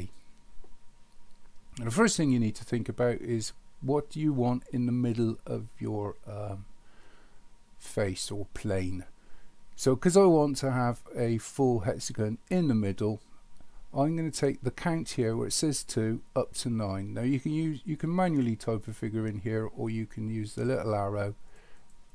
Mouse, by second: 21.5 click, 21.8 click.